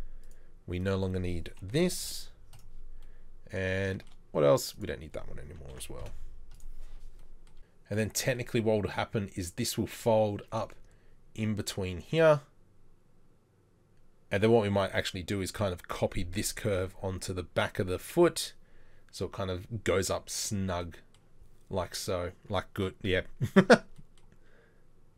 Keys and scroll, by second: 2.1 Delete, 5.8 ctrl+l, 6.1 Delete.